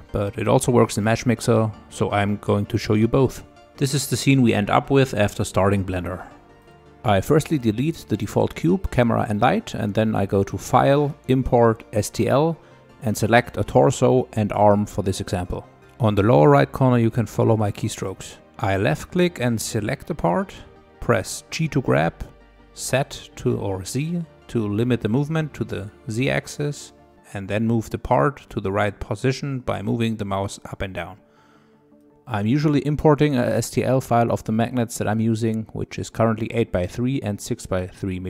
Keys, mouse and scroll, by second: 0.0-0.3 scroll up 2, 0.3-1.6 middle drag, 1.6-2.2 scroll down 1, 3.4 click, 4.2 click, 6.6 Delete, 7.6-10.7 drag, 15.5 middle click, 16.2-18.4 scroll down 15, 18.4 shift+middle click, 19.4-20.1 scroll up 5, 20.1 middle click, 20.7 scroll up 1, 20.9 middle click, 21.4 scroll down 3, 21.6-23.6 middle drag, 23.6 g, 25.4-26.5 middle drag, 26.5 g, 28.3 middle click, 29.2 click, 29.6-30.8 middle drag, 30.8-31.3 scroll up 6, 31.3-31.7 scroll down 3, 31.7 click, 32.0 g, 36.1-36.5 scroll up 2, 36.5-38.2 drag.